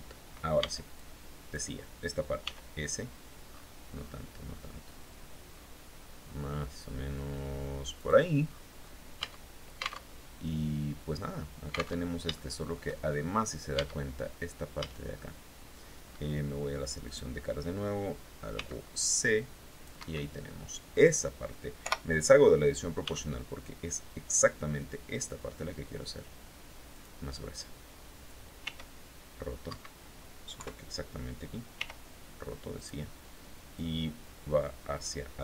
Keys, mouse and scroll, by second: 0.0 b, 0.3 click, 1.9 s, 3.0-3.7 scroll up 3, 3.9 scroll up 2, 5.0-5.3 scroll down 2, 7.4 click, 7.9-8.5 scroll down 2, 8.6 Tab, 9.5 alt+Tab, 11.5 alt+Tab, 11.8 alt+shift+click, 12.4-12.8 shift+scroll up 2, 13.2 Tab, 14.2 a, 16.5 click, 18.0 c, 18.5-19.5 drag, 19.4 Escape, 20.3-20.6 scroll down 2, 21.3 o, 22.5 s, 26.4 click, 28.1 r, 29.1 Escape, 30.0 KP_3, 31.2 r, 32.2 click, 33.2-34.6 drag.